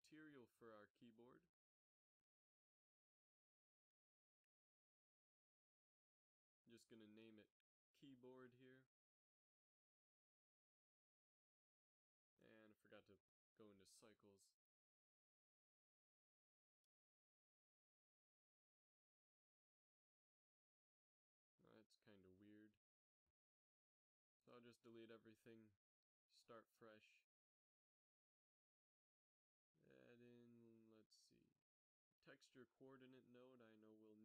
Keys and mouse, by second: 2.1-4.5 middle drag, 4.9 Tab, 6.7 click, 13.6-15.0 drag, 19.3-20.6 right drag, 19.6 g, 20.2 a, 20.3 a, 26.3 x, 26.8 shift+a, 30.4 shift+a.